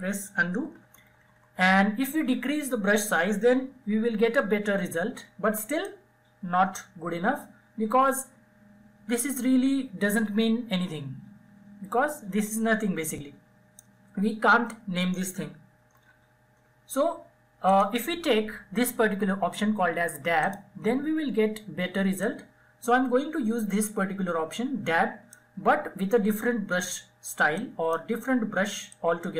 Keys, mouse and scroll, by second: 0.0-0.5 typing, 3.7 [, 3.9 [, 4.5-14.4 drag, 14.7 ctrl+z, 15.4 ctrl+z, 16.4 click, 19.1-26.3 drag, 26.3-29.3 drag.